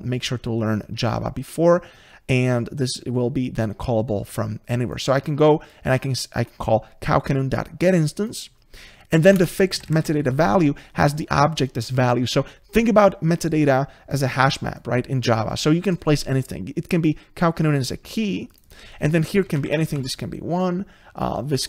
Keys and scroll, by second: 0.3 Escape, 9.6 ctrl+space.